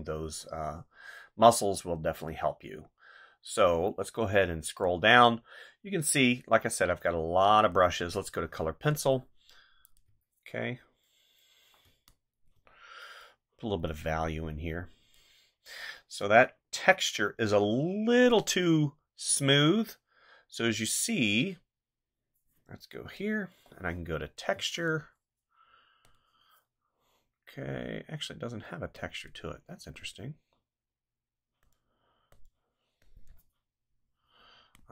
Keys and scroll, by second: 10.1 ctrl+z, 11.8 space.